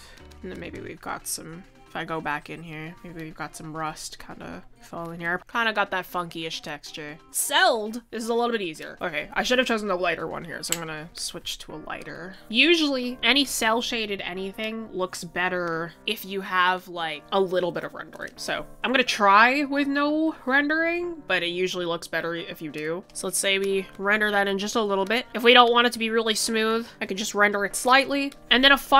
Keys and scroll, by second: 3.5 ctrl+s, 16.8 typing.